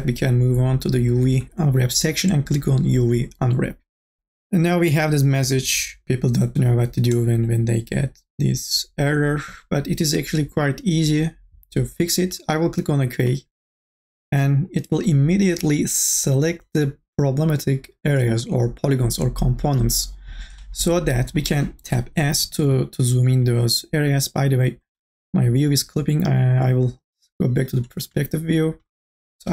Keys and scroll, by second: 22.2 s.